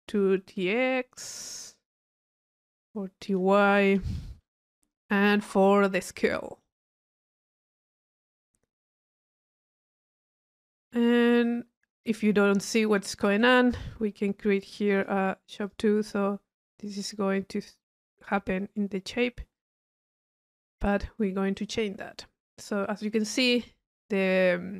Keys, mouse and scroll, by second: 1.3 click, 2.7 right click, 3.3 click, 5.0 click, 6.6 right click, 7.2 click, 9.0 click, 9.9 click, 10.2-10.9 drag, 11.7 click, 12.9-13.9 drag, 15.0 click, 15.6-16.3 drag, 16.6-17.8 middle drag, 19.7 click, 20.6 click, 21.5 click, 22.3-23.8 middle drag.